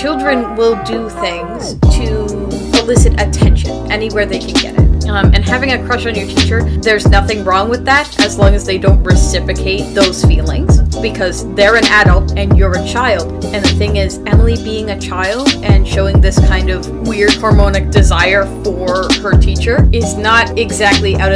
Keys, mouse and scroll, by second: 1.8 space, 3.4 space, 7.4 space, 7.9 space, 9.0 space, 15.5 space, 18.9-20.3 typing.